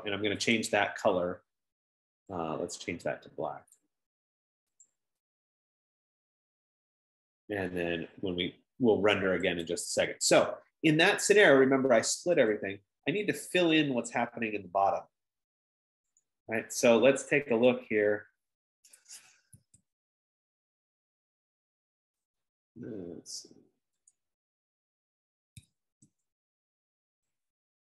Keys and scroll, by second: 21.0 Escape, 26.2 Escape, 26.4 Escape.